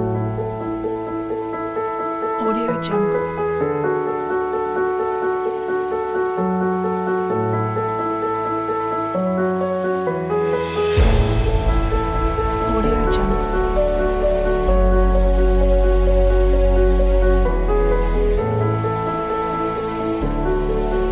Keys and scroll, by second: 0.5-4.2 typing, 6.0 v.